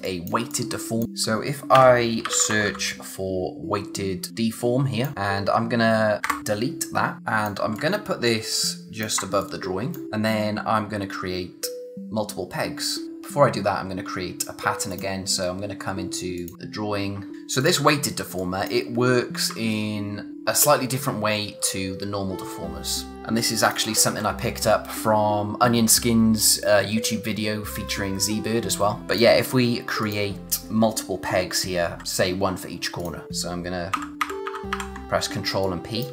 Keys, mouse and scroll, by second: 0.1 click, 1.7 Return, 2.0-3.2 typing, 4.3 click, 7.2 click, 13.0 scroll up 1, 13.3-13.6 scroll down 1, 13.6-14.5 scroll up 1, 14.9 click, 16.5 scroll up 1, 16.7 scroll down 1, 17.4 space, 17.6 click, 18.2 space, 18.4 click, 18.7 space, 23.1 click, 29.2 click, 33.0 click, 33.9 ctrl+p, 35.4 space, 35.6 click, 35.9 space.